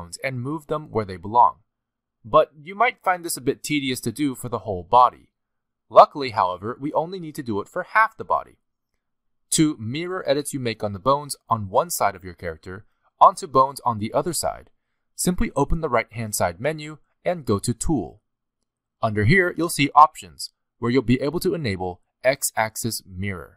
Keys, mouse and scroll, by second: 0.2 middle click, 0.8-1.2 scroll up 2, 1.2 middle click, 1.6 g, 7.3-7.6 scroll down 2, 7.6 shift+middle click, 16.8 click, 18.2 click.